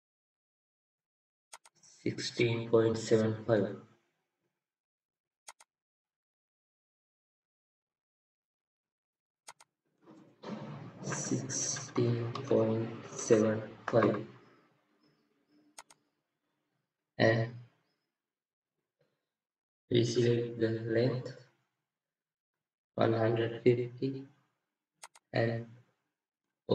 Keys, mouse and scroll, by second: 10.9 1.